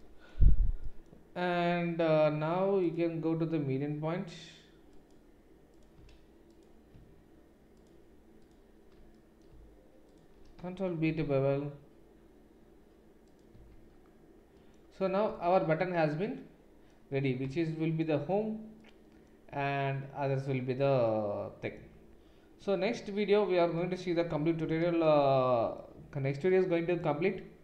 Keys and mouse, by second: 2.9-5.8 drag, 5.8-10.1 alt+middle drag, 10.1 alt+shift+click, 10.3-27.6 ctrl+shift+middle drag, 11.0 ctrl+b, 13.7 Tab.